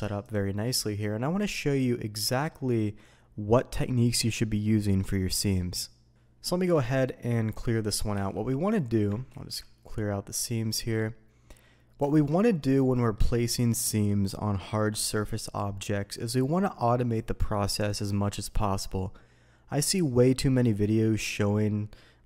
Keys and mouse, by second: 0.2 click, 0.6-2.5 middle drag, 6.4 middle click, 7.0 middle click, 8.1 a, 9.3 ctrl+e, 11.5-12.0 middle drag, 12.1 alt+a, 12.7-13.1 middle drag.